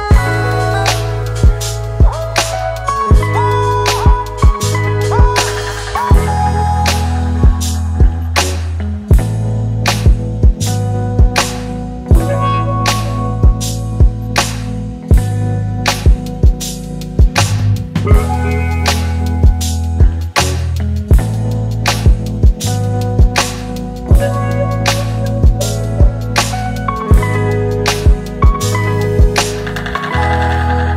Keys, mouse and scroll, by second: 20.7-21.3 alt+scroll down 1.